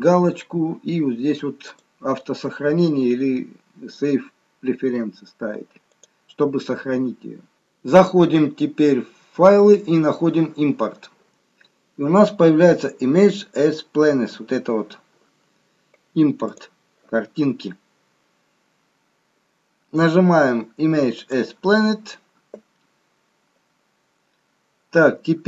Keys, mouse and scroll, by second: 8.2 click, 16.6 click.